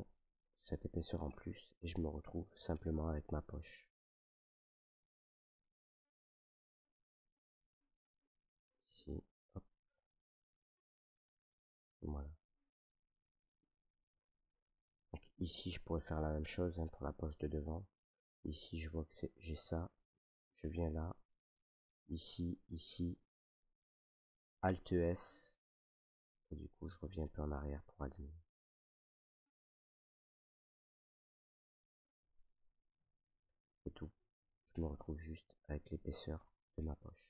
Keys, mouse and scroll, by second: 0.3 click, 1.3 Tab, 1.5 scroll, 2.4 scroll, 3.3 middle click, 3.6 w, 4.3 click, 5.5 w, 6.1 click, 6.4 scroll, 7.4 w, 9.2 click, 9.7 scroll, 10.0 middle click, 10.8 click, 13.4 middle click, 14.1 shift+middle click, 14.2 shift+middle click, 14.6 middle click, 15.4 shift+middle click, 15.7 middle click, 15.8 middle click, 15.8 shift+middle click, 16.2 right click, 16.4 Tab, 18.2 middle click, 20.1 right click, 21.3 middle click, 22.4 ctrl+right click, 23.4 middle click, 24.8 alt+s, 27.5 scroll, 31.9 click, 32.5 scroll, 32.9 middle click, 33.0 middle click, 33.2 Tab, 33.6 middle click, 33.7 middle click, 35.0 middle click, 36.1 middle click.